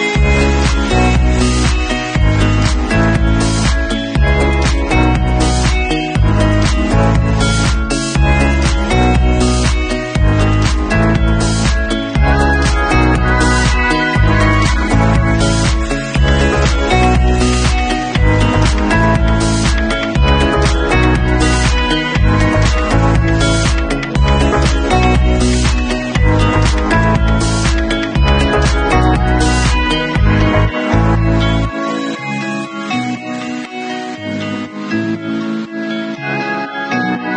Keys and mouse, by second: 1.7-11.9 drag, 13.6 Escape, 14.7-25.4 alt+drag, 25.4-26.4 middle drag, 26.4-29.9 drag, 29.9-31.9 middle drag, 31.4 Escape, 31.9-37.3 alt+drag.